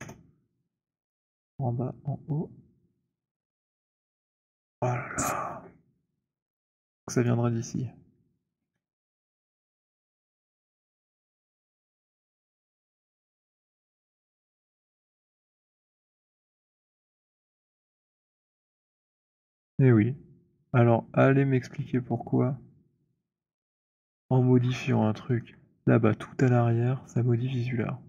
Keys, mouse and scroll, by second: 1.3 click, 3.5 click, 7.2 click, 8.6 w, 9.3 click, 10.6-12.2 alt+middle click, 10.6-11.5 scroll, 11.8 alt+click, 12.3 alt+middle click, 13.2-14.7 alt+scroll, 14.7 right click, 16.1 click, 17.6-23.5 c, 20.3 c, 23.8 middle click, 23.8 c, 24.0-25.0 scroll, 25.4 alt+middle click, 27.9 alt+click.